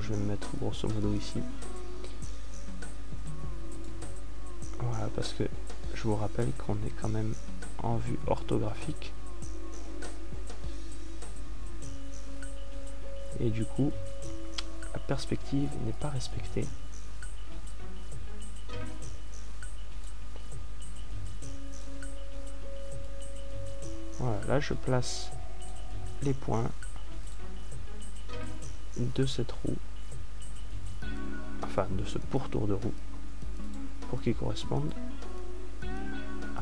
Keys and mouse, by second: 9.2-17.7 middle drag, 21.8-26.9 right drag.